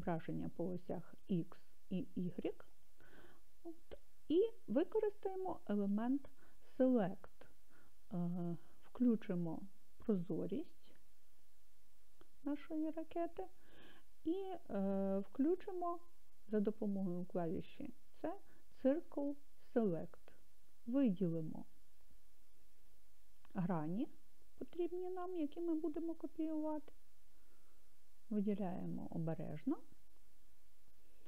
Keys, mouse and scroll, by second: 11.3 click, 17.8 c.